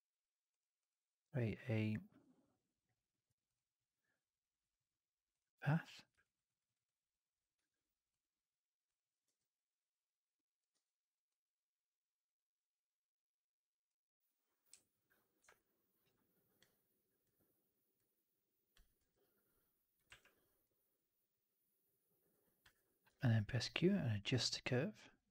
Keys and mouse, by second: 0.4-5.3 drag, 6.1 alt+right drag, 6.4 alt+right drag, 6.6 alt+right drag, 7.4 w, 8.3 click, 9.1 r, 10.6 w, 11.2-13.8 drag, 15.4-15.9 drag, 16.5 click, 19.9 w, 20.5-22.5 drag, 22.9 q.